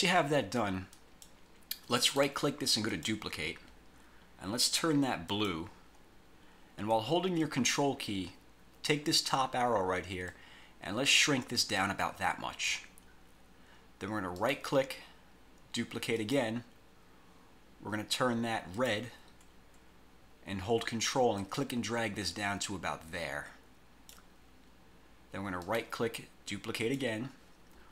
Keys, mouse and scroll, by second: 1.0 click, 2.2 right click, 3.0 click, 5.5 click, 10.4-13.0 ctrl+drag, 14.5 right click, 16.3 click, 18.9 click, 21.5-24.4 ctrl+drag, 25.8 right click, 26.9 click.